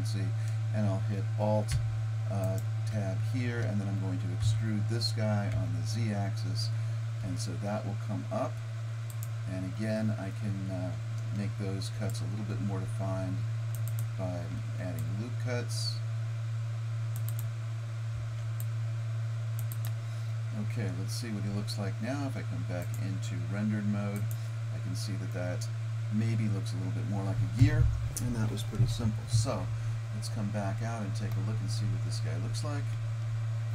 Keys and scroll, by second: 4.5 e, 11.6 ctrl+r, 14.6 ctrl+r, 18.2 ctrl+r.